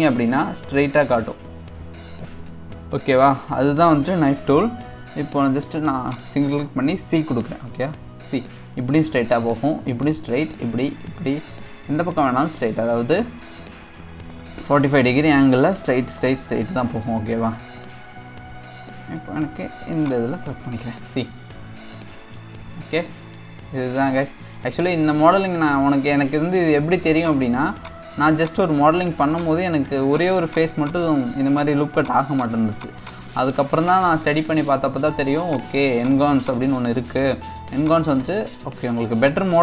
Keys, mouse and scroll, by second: 0.1-1.7 scroll down 2, 1.7 KP_1, 3.4 scroll up 2, 4.5 k, 21.8-22.5 middle drag, 22.5-23.0 scroll down 2, 23.0-23.5 middle drag, 23.5 scroll down 4, 24.0-24.7 middle drag, 24.7-25.2 scroll up 2, 25.2-27.2 middle drag, 27.2 click, 27.8 click, 28.4 click, 29.3 shift+click, 30.0 shift+click, 30.5 shift+click, 30.8 shift+click, 31.2 shift+click, 31.5 shift+click, 32.4 shift+click, 32.7 shift+click, 33.0 shift+click, 33.8 shift+click, 35.5 shift+click, 36.9 click, 37.0 middle click, 37.8 shift+click, 39.2 click.